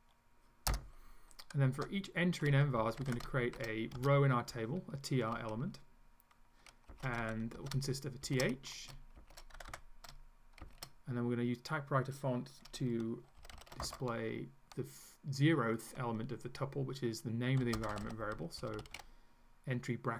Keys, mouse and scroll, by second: 0.7 Return, 1.8 Tab, 2.6-3.9 typing, 4.0 shift+Return, 6.7-9.6 typing, 10.6 shift+., 13.4 shift+[, 13.8 shift+space, 17.4-19.5 typing.